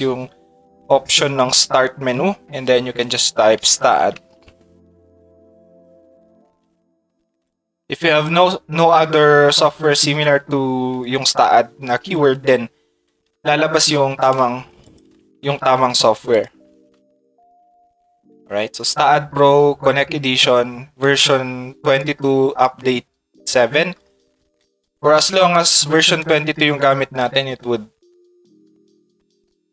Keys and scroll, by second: 3.3-4.6 typing, 17.1 a.